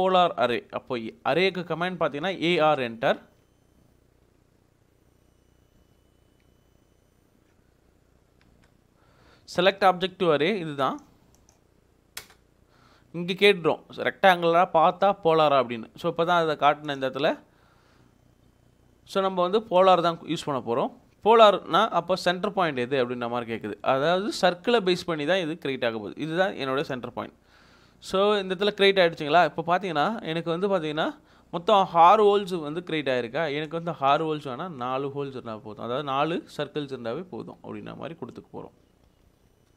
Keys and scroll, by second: 2.8 Escape, 7.5 a, 8.2 r, 8.5 space, 12.2 space, 35.3 1, 37.2 BackSpace, 38.4 1, 39.1 BackSpace.